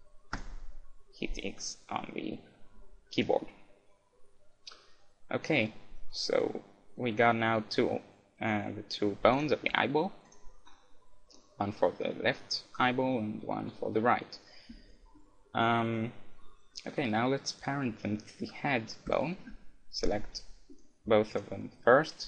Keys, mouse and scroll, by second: 2.0-3.7 middle drag, 7.9-8.8 scroll down 1, 9.2 middle click, 9.3-11.3 drag, 10.8-12.5 middle drag, 15.2-17.0 middle drag, 17.5-22.2 right drag.